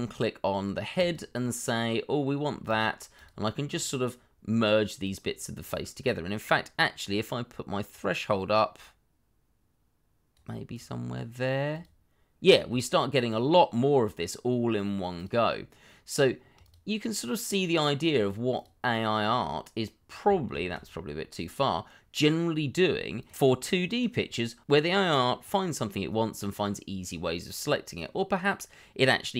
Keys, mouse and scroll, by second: 2.6 shift+click, 5.0 shift+click, 13.3 shift+click, 15.1 shift+click, 16.1 shift+click, 17.5 shift+click, 18.5 shift+click, 20.5 ctrl+z, 23.2 shift+click.